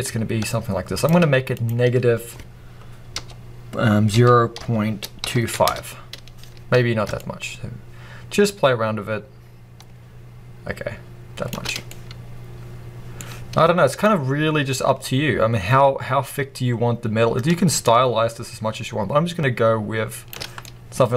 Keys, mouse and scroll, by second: 1.4 click, 5.6 Return, 7.1 shift+click, 11.7 scroll down 2, 11.8-13.9 middle drag, 13.9-20.5 shift+drag, 20.5 middle click.